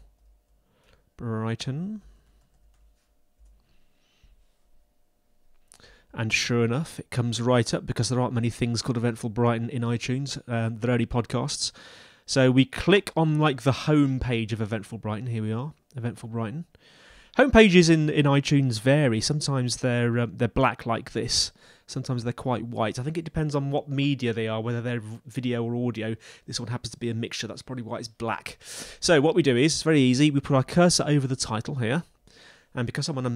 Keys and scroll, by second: 0.0-3.2 typing, 3.4 Left.